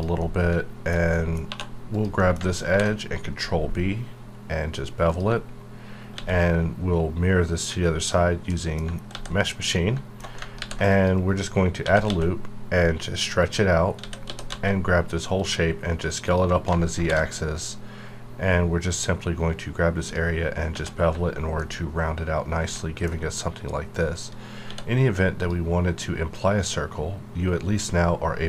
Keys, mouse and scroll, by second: 0.2 middle click, 1.5 2, 1.9 click, 2.2 middle click, 2.7 ctrl+b, 3.2-5.1 scroll up 2, 5.1 click, 6.1 alt+x, 8.5 middle click, 9.1 alt+x, 9.7 middle click, 10.6 ctrl+r, 10.9 click, 11.2 right click, 11.8 s, 12.0 x, 13.4 click, 13.7 scroll down 1, 14.0 a, 14.2 s, 14.4 z, 15.3 click, 15.7 scroll down 1, 16.2 alt+click, 17.0 ctrl+g, 18.4-20.0 scroll up 1, 20.0 click, 21.6-24.6 middle drag, 24.6 d, 25.4 click.